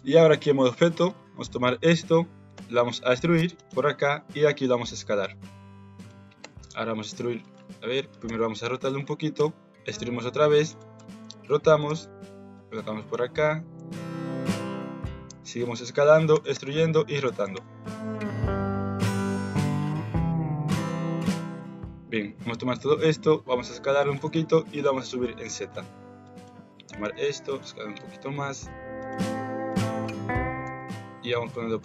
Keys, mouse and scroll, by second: 1.2 click, 2.5 e, 3.9 s, 6.3 e, 7.6 ctrl+z, 8.2 r, 9.3 e, 10.9 r, 11.8 g, 13.2 s, 16.3 r, 17.6-21.1 typing, 21.6 click, 22.7 s, 24.2 g, 26.3 click, 26.7 s, 27.6 g, 29.7 click, 30.6 g.